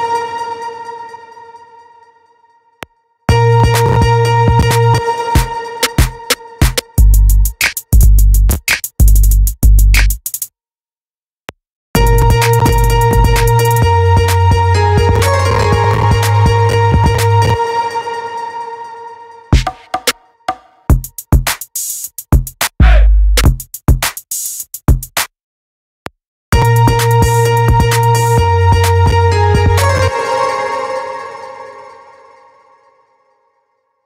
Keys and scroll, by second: 2.2 space, 4.3 space, 11.5 space, 17.0 space, 25.4 space, 29.4 space.